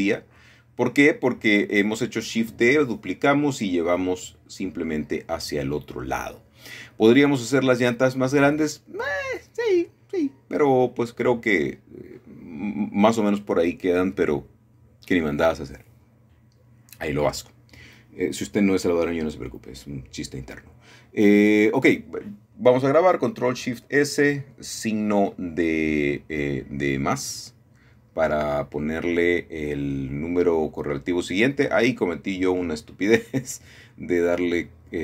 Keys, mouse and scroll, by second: 1.0-2.2 scroll down 2, 2.2-3.3 shift+middle drag, 3.3 KP_1, 4.6 shift+middle click, 6.3 shift+d, 6.8 Escape, 7.8 g, 8.3 x, 13.0 shift+middle click, 14.8 scroll down 1, 16.3 middle click, 16.7 middle click, 17.9-19.9 middle drag, 22.4 middle click, 23.0 scroll up 1, 24.8 ctrl+shift+s, 32.4 click.